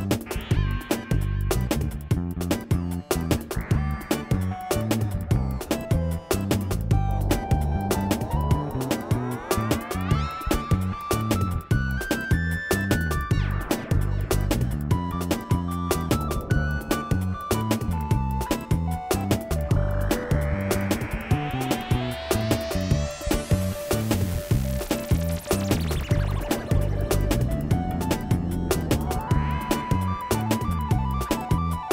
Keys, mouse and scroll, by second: 0.0 Tab, 0.6 g, 2.0 g, 3.1 click, 4.1 g, 5.9 g, 6.6 click, 7.4 g, 8.7 ctrl+shift+a, 9.6 ctrl+a, 10.5 click, 11.0 ctrl+a, 11.6 ctrl+a, 13.0 ctrl+a, 13.5 ctrl+z, 13.8 ctrl+z, 13.8 click, 14.4 Tab, 14.5 click, 14.8 click, 15.0 click, 15.3 Tab, 15.8 ctrl+a, 16.7 g, 18.1 ctrl+a, 18.8 g, 19.4 click, 19.8 Tab, 20.2 click, 20.5 click, 20.6 middle click, 21.0 Tab, 21.5 ctrl+a, 22.2 click, 22.4 ctrl+a, 23.1 Tab, 23.3 click, 23.8 KP_5, 26.1 shift+a, 26.1 f, 26.4 click, 26.7 click, 27.6 s, 28.2 click, 29.1 click, 29.5 g, 30.0 Tab, 30.3 click, 31.0 g, 31.8 click.